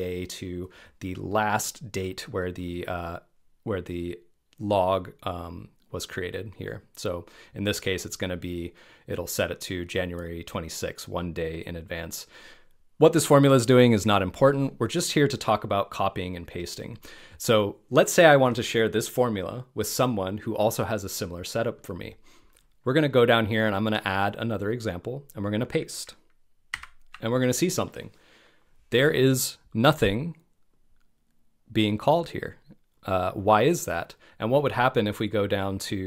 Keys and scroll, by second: 26.7 super+v, 28.2 super+v.